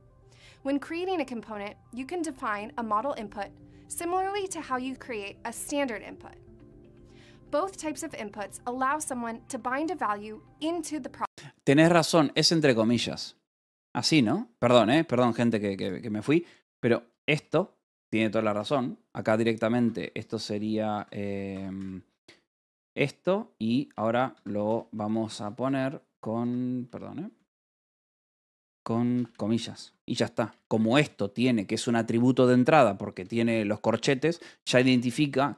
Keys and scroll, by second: 15.0 space, 16.8 l, 18.4-22.9 typing, 19.7 Escape, 20.9 Escape, 24.2 Escape, 24.5-29.1 typing, 26.0 Escape, 29.5 Escape, 30.3 h, 31.4 shift+v, 32.2 Escape, 33.0 v, 34.1 Escape, 34.4-35.5 typing.